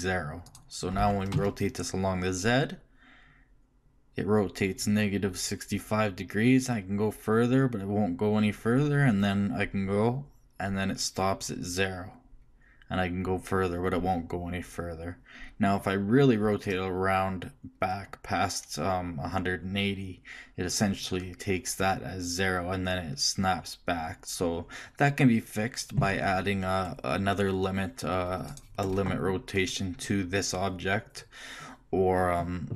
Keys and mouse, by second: 1.0 click, 1.0 r, 1.0-2.3 right drag.